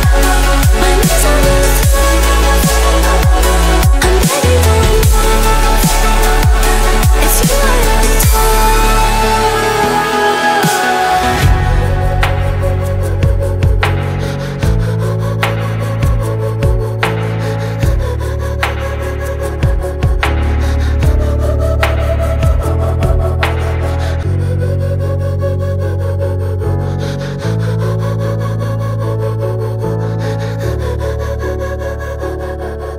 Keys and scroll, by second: 0.4 Return, 0.6 2, 1.4 Return, 1.7 2, 2.6 Return, 3.2 2, 3.8 Return, 4.0 2, 4.4 1.